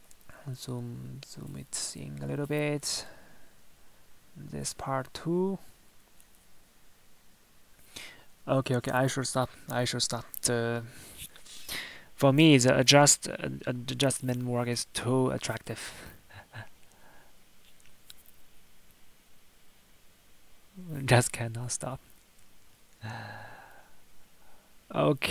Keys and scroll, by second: 1.3 Tab, 14.4 Tab, 16.4 Tab, 23.7 Tab.